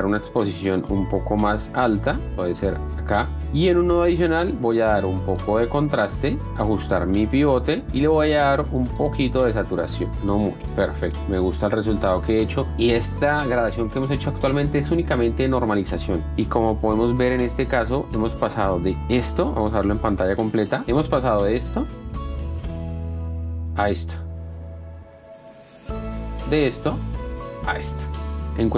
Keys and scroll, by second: 3.9 s, 16.3 F1, 17.6 ctrl+d, 20.8 p, 22.3 space, 24.0 ctrl+d.